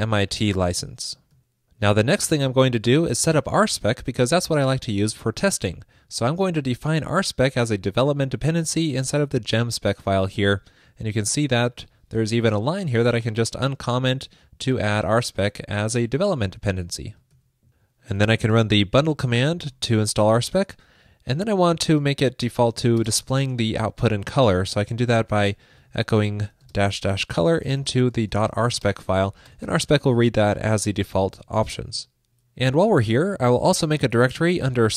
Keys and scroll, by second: 11.8 super+/, 17.4 super+s.